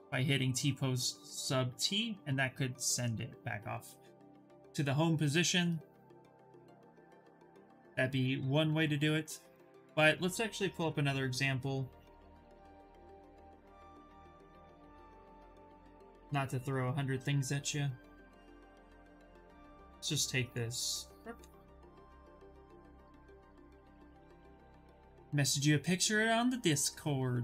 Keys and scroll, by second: 10.4 ,.